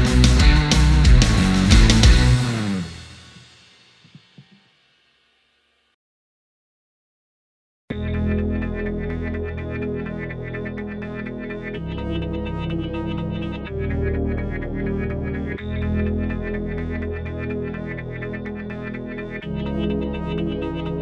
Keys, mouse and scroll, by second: 4.6-9.1 drag, 9.5-15.3 drag, 17.2 ctrl+right click, 19.5 ctrl+r.